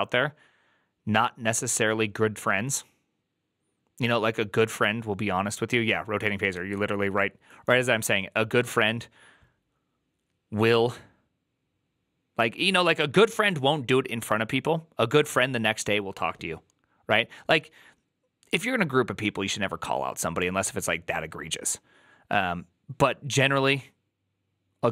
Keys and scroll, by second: 6.4 alt+[, 8.5 alt++.